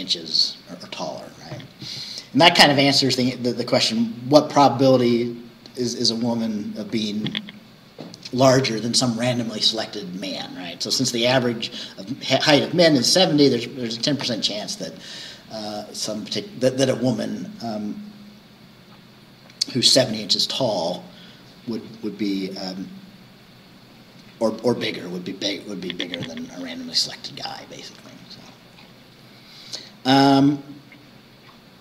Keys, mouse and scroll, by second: 1.3-5.6 scroll up 1, 5.6-9.8 scroll up 1, 9.8-14.1 scroll up 1, 14.1-18.4 scroll up 1, 18.4-22.6 scroll up 1, 22.6-26.9 scroll up 1, 26.9-28.5 scroll up 1, 28.5 scroll up 1, 28.7-29.9 scroll down 2, 29.9-30.4 scroll down 1.